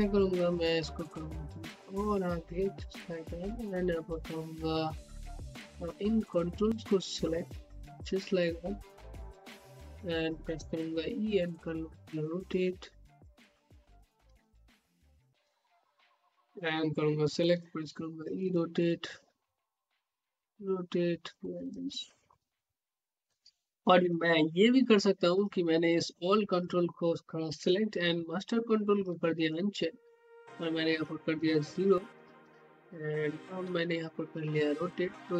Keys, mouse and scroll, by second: 1.3-10.6 drag, 10.6 e, 11.5-13.4 drag, 13.7 scroll up 1, 14.6 scroll up 1, 15.0 alt+middle click, 15.9-21.6 drag, 21.9 alt+middle click, 22.5 scroll up 1, 25.3 click, 28.4-31.6 ctrl+drag, 31.6 ctrl+x, 33.5 e, 34.2-35.3 drag.